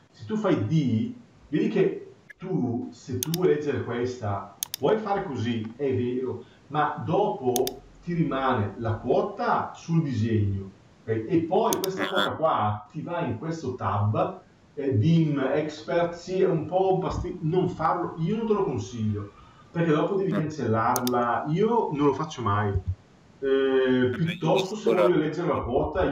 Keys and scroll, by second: 22.5 Delete.